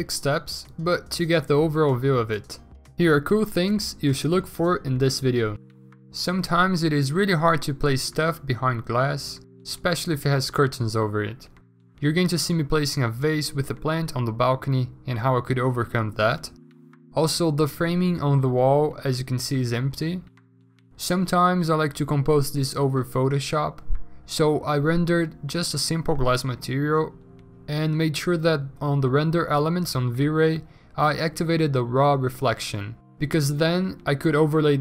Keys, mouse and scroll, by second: 4.7-5.2 scroll, 8.7-10.3 typing, 11.6 ctrl+z, 12.3 3, 12.6 ctrl+z, 12.7 x, 13.5 ctrl+z, 14.8-16.5 typing, 16.8 ctrl+z, 18.8-21.3 typing, 19.3 ctrl+g, 21.9 ctrl+z, 22.6 ctrl+alt+g, 22.7 b, 23.1 x, 23.3 ctrl+z, 24.1 ctrl+z, 24.6 ctrl+alt+z, 24.6 ctrl+alt+z, 25.2 ctrl+z, 26.6 ctrl+z, 27.8 ctrl+z, 28.7 x, 29.8 x, 30.8 ctrl+z, 30.8 x, 32.6 ctrl+z.